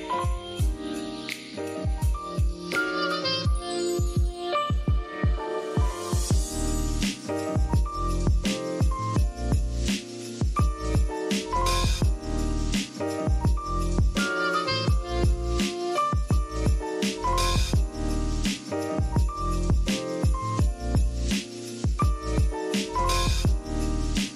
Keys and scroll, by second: 0.0-0.1 typing, 3.0 i, 4.0 v, 6.3-7.3 typing, 10.9 shift+super+}, 11.3-12.6 typing, 14.4 super+z, 21.0 i, 21.3 v, 21.6 super+x, 22.4 super+v.